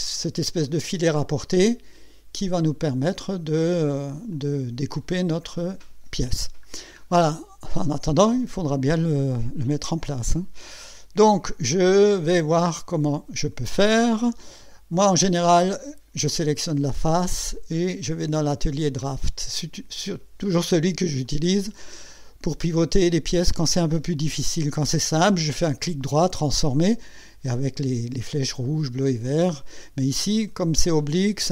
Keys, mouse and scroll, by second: 0.9 scroll down 1, 1.6-2.8 drag, 4.3-5.0 drag, 5.5 scroll up 1, 6.7-7.0 scroll down 1, 16.3 click, 18.0 click, 19.0 click, 21.2-24.0 drag.